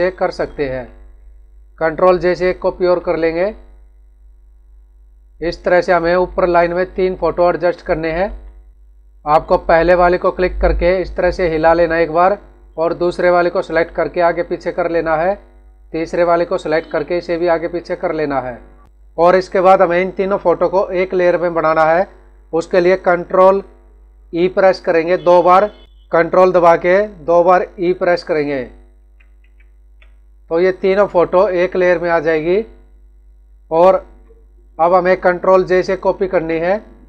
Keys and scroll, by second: 2.7 ctrl+j, 5.8 Up, 6.7 Down, 7.4 Right, 10.6 Left, 11.1 Right, 11.8 Left, 13.9 Right, 14.6 Left, 16.9 Right, 18.5 Left, 28.9 ctrl+e, 33.7 Right, 34.2 Up, 36.1 ctrl+j.